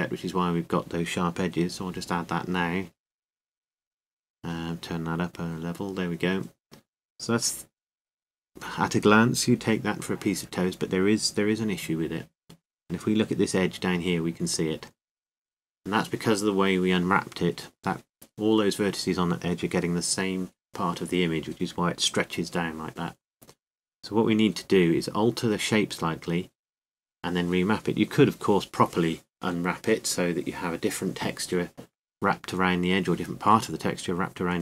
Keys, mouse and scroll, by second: 3.6-5.0 drag, 6.6-10.3 drag, 10.5 Tab, 11.7 Tab, 13.6-15.1 middle drag, 18.1 Tab, 25.2-26.5 drag, 26.5-27.6 middle drag, 29.0-34.6 right drag, 31.6 c.